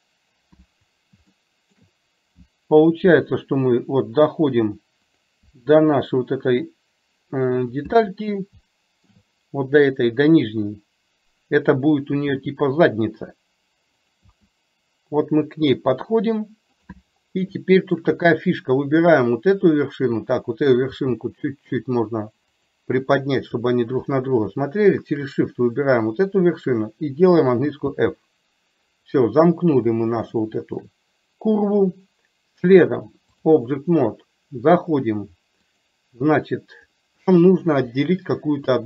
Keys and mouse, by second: 1.5 shift+middle click, 8.8 shift+middle click, 17.6 shift+middle click, 20.0 click, 25.1 shift+click, 30.3 shift+middle click, 32.8 click, 37.4 shift+middle click, 38.7-38.8 shift+middle drag.